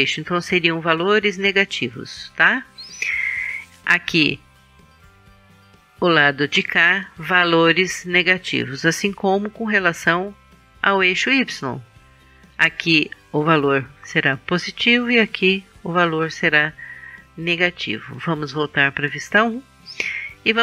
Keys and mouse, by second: 18.7 KP_1.